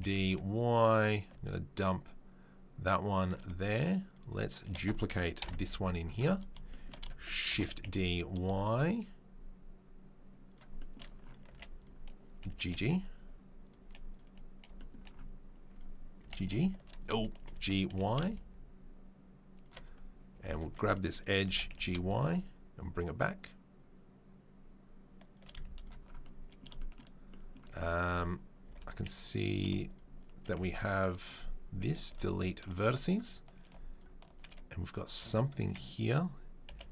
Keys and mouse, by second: 4.0 click, 4.1-11.8 shift+middle drag, 5.4 ctrl+l, 7.5 shift+d, 11.8 click, 11.8-29.0 middle drag, 12.4 g, 14.1 click, 15.7 click, 16.2 g, 17.5 g, 20.4 alt+click, 21.4 g, 27.6 z, 28.7 2, 29.0 click, 29.1 middle click, 29.8 shift+right click, 29.9-33.0 shift+middle drag, 32.1 Delete, 33.0 alt+click, 33.1 alt+middle click, 34.3 shift+middle click, 34.9 click, 35.4-36.9 alt+middle drag.